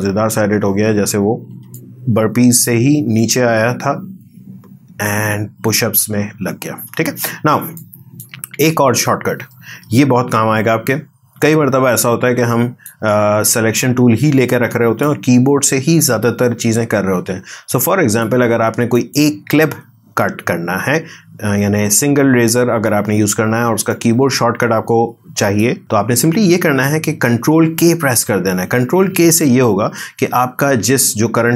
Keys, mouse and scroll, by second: 1.5 space, 1.7 click, 2.8 space, 6.7 space, 7.7 click, 8.4 ctrl+z, 10.5-15.0 drag, 15.0-19.0 drag, 23.9-27.7 drag, 27.7 ctrl+k.